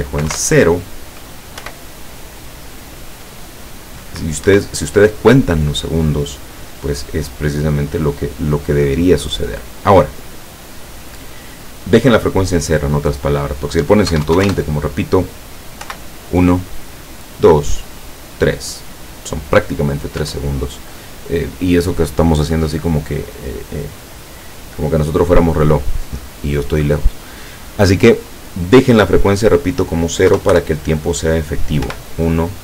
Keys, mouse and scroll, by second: 0.2 KP_0, 0.3 KP_Enter, 1.6 p, 4.5 Escape, 13.3 click, 14.1 KP_1, 14.3 KP_2, 14.4 KP_0, 14.5 KP_Enter, 15.9 p, 20.2 Escape, 29.6 click, 30.3 0, 30.5 Return, 31.9 p.